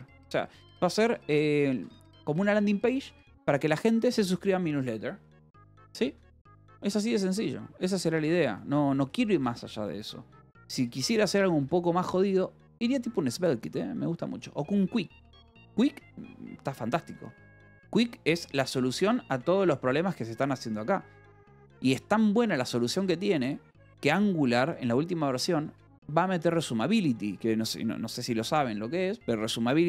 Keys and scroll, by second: 0.0-1.0 typing, 0.4 Escape, 2.6 a, 3.4 Escape, 3.5 j, 4.7-10.7 typing, 6.1 Escape, 7.1 Escape, 9.6 Escape, 12.0 j, 14.6 o, 15.8 BackSpace, 17.8 Return, 18.5 BackSpace, 19.0 Return, 19.3 BackSpace, 19.5 Escape, 19.8 k, 21.7 s, 22.3 Escape, 22.9 j, 25.0 shift+v, 25.6 Escape.